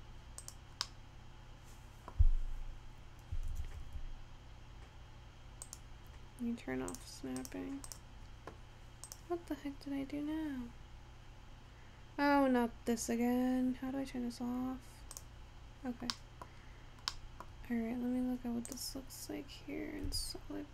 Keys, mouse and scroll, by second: 0.9-2.3 middle drag, 2.3-3.5 scroll up 4, 3.5 e, 7.5 click, 8.6 click, 9.4 click, 10.1-11.3 scroll down 3, 12.8-15.2 scroll down 4, 15.2 click, 15.8-16.2 scroll down 3, 16.2-16.8 scroll up 5, 16.3 middle click, 17.3-18.8 middle drag, 18.8 click, 20.2 Tab.